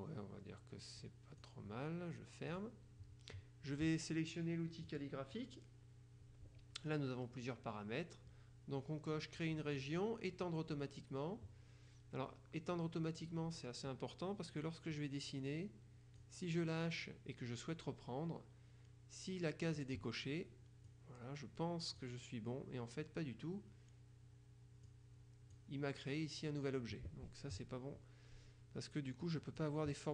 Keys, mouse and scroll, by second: 1.1 click, 2.6 click, 5.0 click, 15.0-16.8 drag, 19.9 click, 21.0-22.6 drag, 25.0 click, 29.3 click.